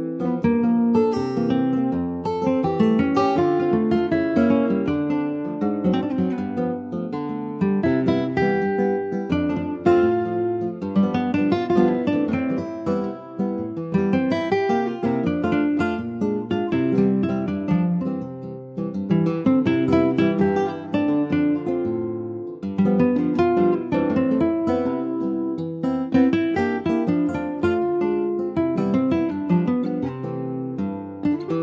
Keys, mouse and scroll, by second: 0.4 click, 1.4 alt+z, 1.9-3.3 middle drag, 3.3 click, 3.7 middle click, 4.4 alt+z, 4.8 middle click, 5.2 ctrl+s, 6.6 ctrl+shift+b, 8.6 ctrl+z, 9.0 click, 10.2 click, 10.9 shift+click, 11.8 ctrl+shift+b, 14.1-17.2 middle drag, 18.3 click, 18.8-21.2 middle drag, 21.2 ctrl+z, 22.0 ctrl+z, 22.4 click, 23.0 middle click, 23.8 click, 24.2 click, 25.1 2, 25.6 3, 25.8 click, 26.8 Tab, 27.0 click, 28.1 click, 29.4 middle click, 29.9 Tab, 30.4 ctrl+s, 30.8 middle click, 31.3 click.